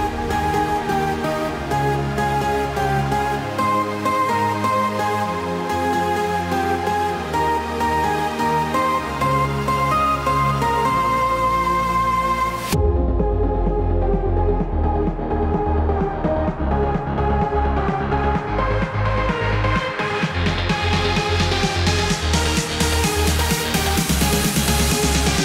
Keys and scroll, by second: 0.3 ctrl+d, 6.6 ctrl+BackSpace.